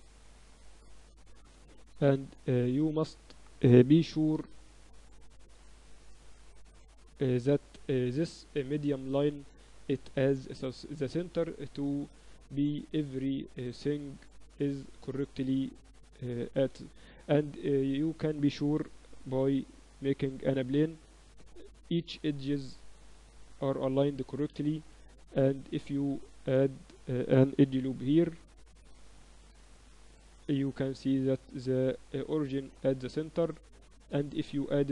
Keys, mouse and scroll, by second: 0.3-2.1 drag, 2.1 shift+s, 3.5 Tab, 4.5 ctrl+alt+shift+c, 6.6-11.1 middle drag, 8.4 Tab, 9.1 Tab, 9.9 Tab, 12.0-13.9 middle drag, 16.1-18.3 drag, 17.6 shift+a, 18.3 middle click, 19.1 s, 25.2 Tab, 25.7 ctrl+r, 26.5 a, 28.0 x, 29.5-31.4 right drag, 30.2 Tab, 33.9 Tab, 34.5-34.9 drag.